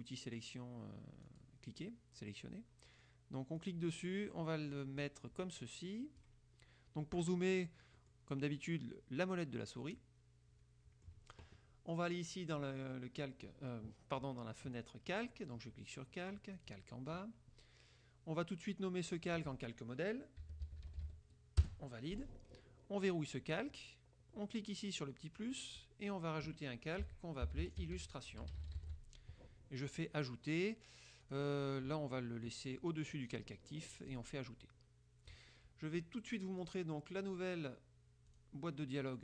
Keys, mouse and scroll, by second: 1.5 click, 3.7-6.5 drag, 7.7 click, 8.1 click, 8.6 click, 10.0 middle click, 10.3-11.4 drag, 14.8 click, 16.7 click, 19.2 click, 20.3-21.7 typing, 21.7 Return, 23.4 click, 25.5 click, 26.9-29.4 typing, 31.3 click, 33.4 click, 34.2 click, 36.7 click, 38.4 click.